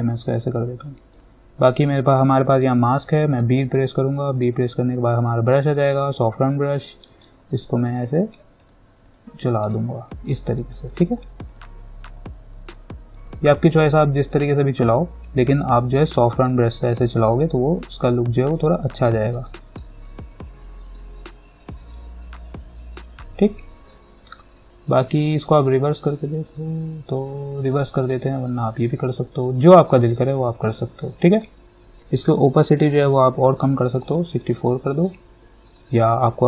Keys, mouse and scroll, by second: 1.4 click, 3.6 b, 4.7 alt+right click, 7.0-8.8 alt+right drag, 8.8 click, 10.6 alt+right click, 11.2 click, 13.0 alt+right click, 14.0 x, 14.4 alt+right click, 15.4 click, 19.7 alt+right click, 20.6 x, 21.1 click, 22.0 ctrl+z, 23.2 click, 26.5 click, 33.9-34.8 typing, 35.9 click.